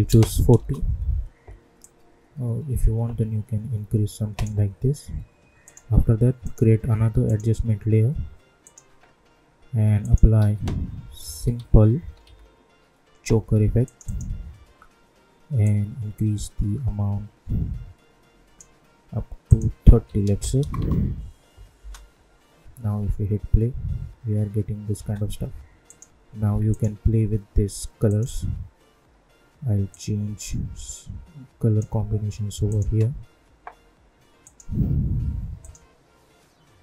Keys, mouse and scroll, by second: 0.5 Return, 1.8-5.6 drag, 6.4 right click, 7.2 click, 10.3 ctrl+a, 10.7-12.7 typing, 13.8-19.4 drag, 20.6 Return, 21.7 space, 24.9 space, 25.8-36.8 drag.